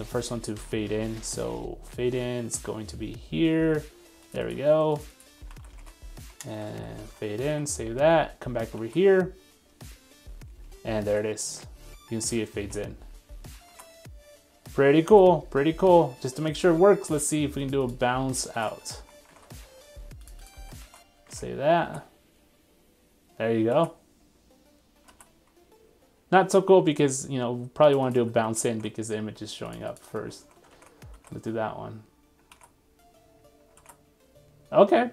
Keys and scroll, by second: 4.5 super+c, 5.6 super+c, 5.8 super+Tab, 6.7 super+v, 7.0 super+s, 7.5 super+Tab, 8.0 super+1, 15.1 super+3, 18.7 super+c, 19.0 super+1, 20.6 super+v, 20.8 super+s, 21.4 super+Tab, 21.8 super+r, 28.3 super+c, 28.5 super+1, 30.2 super+v, 30.4 super+s, 30.9 super+Tab, 31.2 super+r.